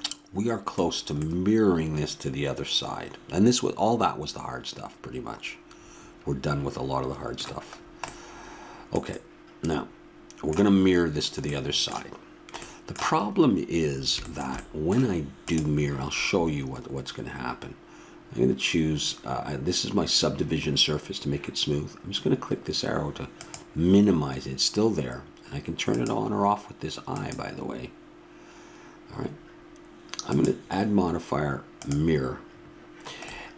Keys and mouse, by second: 1.8-15.4 middle drag, 15.4-17.2 drag, 23.4-25.2 drag, 26.0 click, 30.2-32.2 drag.